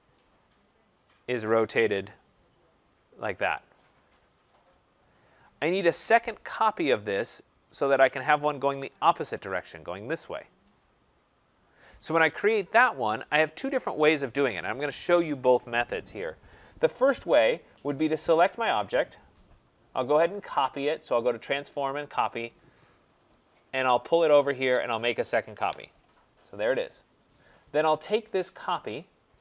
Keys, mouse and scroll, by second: 2.0 right click, 5.4-10.4 drag, 18.1-21.3 drag, 22.1 click, 22.6-23.1 scroll, 23.4 click, 24.3 click, 25.5 Return, 26.1 middle click, 28.6 click.